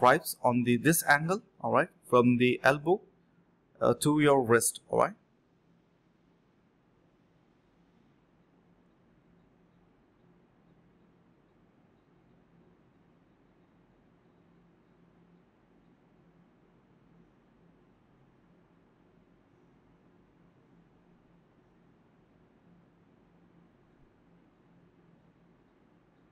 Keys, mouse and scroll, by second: 0.8 double click, 1.9 alt+click, 2.0 alt+click, 2.8 double click, 3.7 alt+click, 4.1 alt+click, 5.1 alt+click, 5.8 alt+click, 6.5 double click, 7.1 alt+click, 7.4 alt+click, 7.9 alt+click, 8.8 alt+click, 9.3 double click, 10.2 shift+click, 11.2 double click, 13.6 alt+click, 14.1 typing, 14.4 double click, 15.3 shift+click, 16.5 alt+click, 16.8 alt+click, 16.9 alt+click, 17.2 alt+click, 17.3 alt+double click, 17.4 alt+click, 18.1 typing, 18.4 double click, 20.3 double click, 20.9 double click, 20.9 shift+click, 21.0 shift+double click, 21.1 shift+click, 21.3 alt+click, 21.4 alt+click, 22.5 alt+click, 22.7 alt+click, 23.2 alt+click, 23.7 alt+click, 24.0 alt+click, 24.6 ctrl+b, 24.8 double click, 25.2-25.7 typing, 25.9 alt+click.